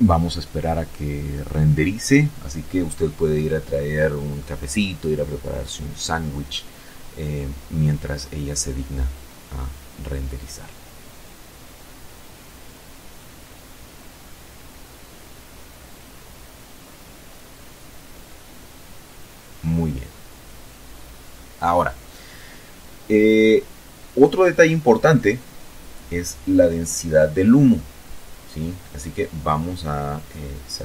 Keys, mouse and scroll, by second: 30.0 ctrl+Right.